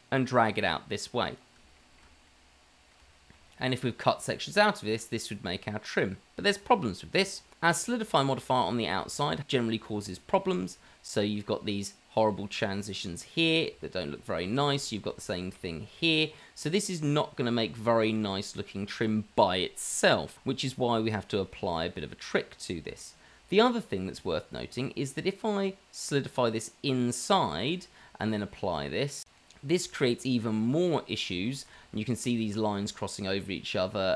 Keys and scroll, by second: 29.9 Tab, 31.7 Tab.